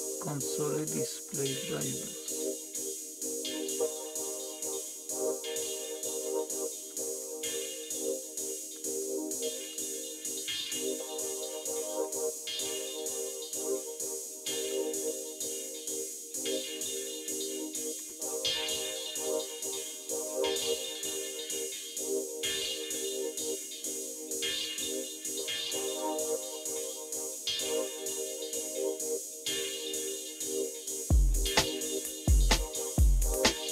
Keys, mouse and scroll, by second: 0.6 Down, 1.0 Down, 1.2-1.7 Down, 2.0 Down, 2.2 Down, 2.6 Down, 2.6 Down, 3.5 Down, 3.7 Down, 3.9 Down, 4.1-5.7 Down, 6.3 Down, 6.6 Down, 6.9 Down, 7.2 Down, 7.4 Down, 7.7 Down, 7.9 Down, 8.5 Down, 9.4 Down, 10.2 Down, 10.9 Down, 11.1 Down, 12.5 Down, 14.7 Down, 15.0 Down, 15.3 Down, 17.8 Down, 17.8 Return.